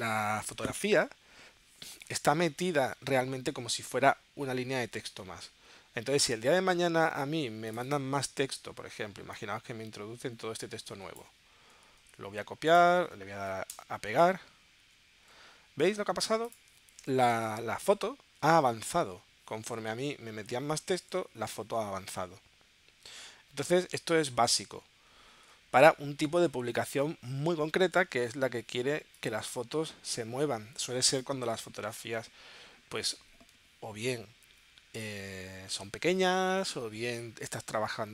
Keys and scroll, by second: 12.3 super+c, 13.7 Return, 15.0 super+v, 18.7 super+z, 20.7 shift+super+z, 25.7 super+z, 27.9 super+z.